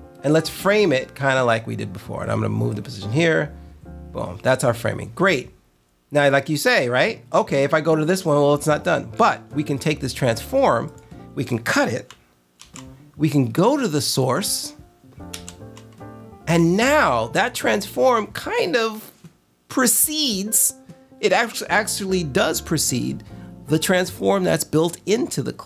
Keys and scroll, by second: 12.5 super+x, 15.2 super+v.